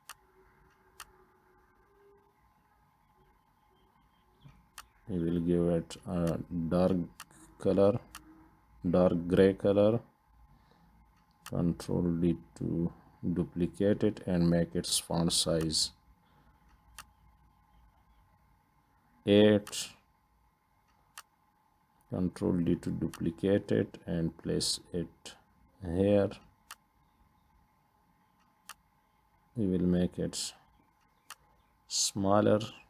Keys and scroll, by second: 9.6 ctrl+d, 21.9 ctrl+d.